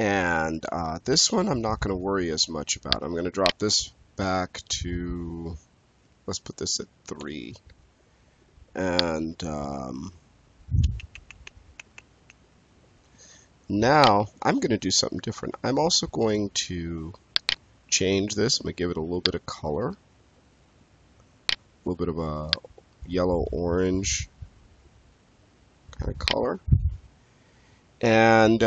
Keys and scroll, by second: 7.1 3, 7.6 Return.